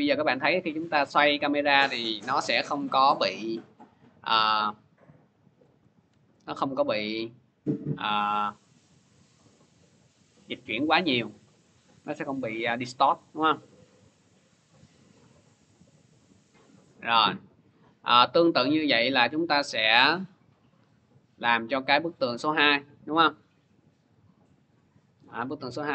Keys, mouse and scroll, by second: 5.4 click, 6.0 ctrl+z, 11.8 click, 12.3 ctrl+z, 16.1 click, 16.9 ctrl+z, 18.3 click, 20.6 click, 21.7-22.1 scroll, 22.9 v, 23.8 middle click, 23.9 click, 24.5 middle click.